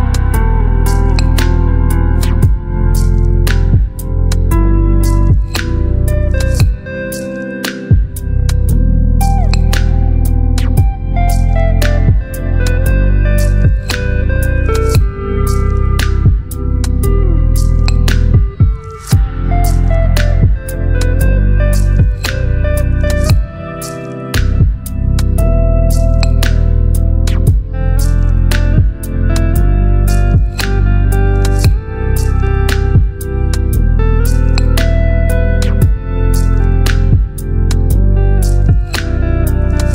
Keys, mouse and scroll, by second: 3.9-8.2 drag, 15.7-28.5 shift+drag, 31.8 shift+Num_Lock, 32.4-34.5 shift+drag.